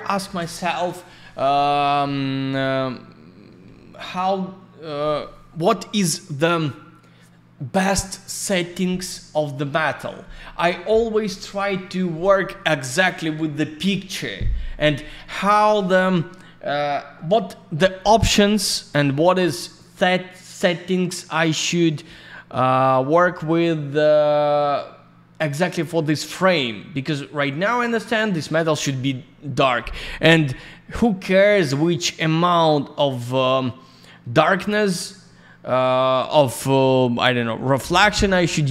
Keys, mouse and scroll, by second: 4.1-4.6 scroll up 1, 4.6-5.9 scroll down 1, 9.9-10.7 scroll down 1, 20.3-20.7 scroll up 1, 21.9 click, 25.5-26.1 scroll down 1, 27.4 scroll up 1, 32.4 click, 35.5-36.0 scroll down 1.